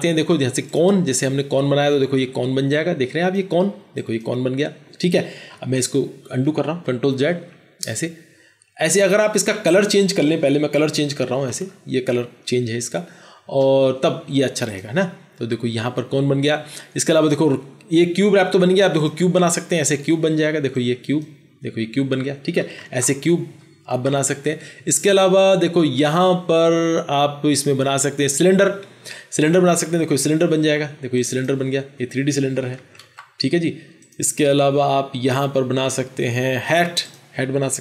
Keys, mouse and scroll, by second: 5.7 ctrl+z, 6.5 ctrl+z, 7.2 ctrl+z, 11.5 alt+BackSpace, 22.7 ctrl+z, 23.8 ctrl+z, 32.7 ctrl+z, 32.9 ctrl+z.